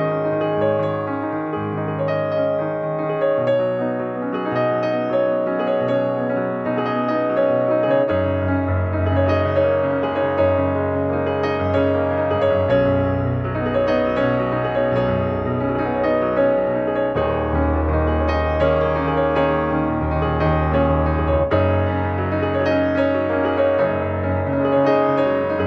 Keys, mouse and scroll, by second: 3.4 ctrl+2, 7.1 ctrl+click, 10.8 Escape, 12.0 click, 17.2 r, 18.8 click, 19.6 r.